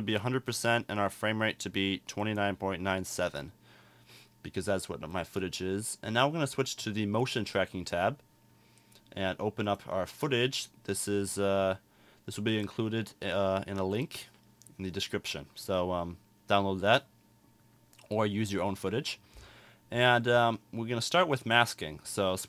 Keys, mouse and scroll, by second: 21.4 click.